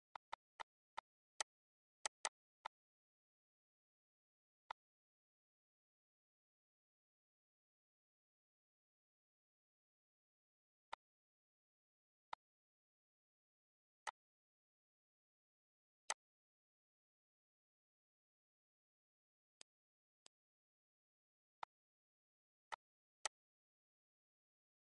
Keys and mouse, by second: 0.4 click, 2.2 ctrl+s, 2.4 ctrl+s, 3.2 click, 10.2 click, 11.5 click, 12.4 ctrl+g, 13.2 click, 14.6 ctrl+g, 15.2 click, 16.3 ctrl+g, 18.6 click, 19.2 click, 20.2 ctrl+g, 20.6 click, 21.3 ctrl+g, 21.7 click, 22.7 ctrl+s, 23.0 ctrl+s.